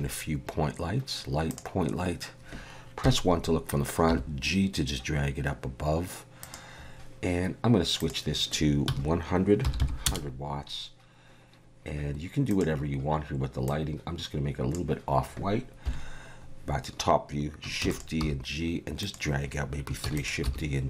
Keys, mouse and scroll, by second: 3.0 KP_1, 4.1 g, 8.0 click, 9.8 0, 12.5 click, 15.9 KP_7, 17.8 shift+d, 18.2 g, 20.0 shift+d, 20.4 g.